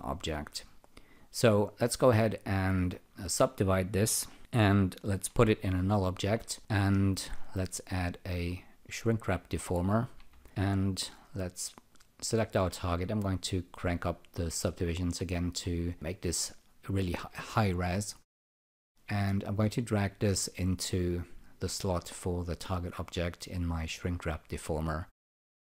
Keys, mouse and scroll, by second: 2.8 alt+click, 4.3 e, 5.5 alt+g, 8.2-9.8 shift+drag, 13.8 click, 13.9 double click, 18.7 click, 20.1 click.